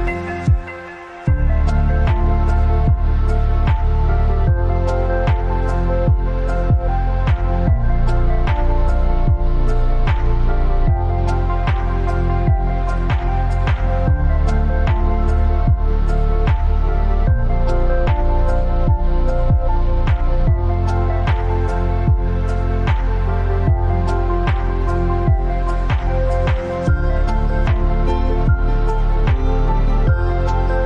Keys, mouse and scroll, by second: 2.6 click, 7.7 ctrl+scroll down 1, 8.8 alt+scroll down 1, 11.6-12.1 scroll up 1, 12.7 click, 14.2 ctrl+x, 15.5 ctrl+z, 16.3-18.0 alt+drag, 18.0 t, 18.3 click, 18.7 ctrl+a, 19.7 click, 21.8 click, 22.5-22.8 scroll down 1, 24.4-25.5 scroll down 1, 26.3 click, 27.3-27.7 alt+scroll down 1, 27.9 space, 28.1 click, 28.2 space, 29.7 v, 30.1-30.8 drag.